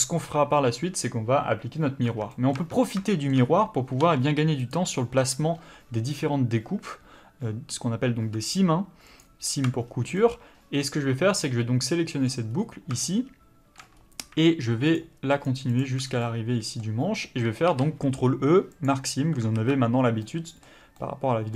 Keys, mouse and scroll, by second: 2.0 Tab, 2.3 middle click, 2.5 Tab, 3.1 shift+middle click, 3.6-4.0 scroll up 1, 4.0 2, 4.6 click, 9.8 scroll down 1, 10.2 middle click, 11.0-11.4 scroll down 1, 11.5 middle click, 12.5 scroll up 1, 13.0 shift+middle click, 13.9-14.9 scroll up 1, 14.9 shift+click, 16.0 scroll down 1, 16.2 middle click, 18.8 ctrl+e, 19.5 alt+a, 19.9 scroll down 1, 20.2 middle click.